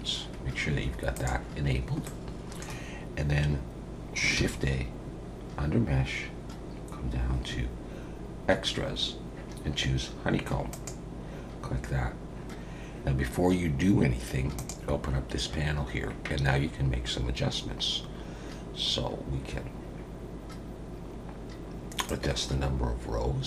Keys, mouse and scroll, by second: 2.0 middle click, 4.4 shift+a, 14.7 click, 22.1 click.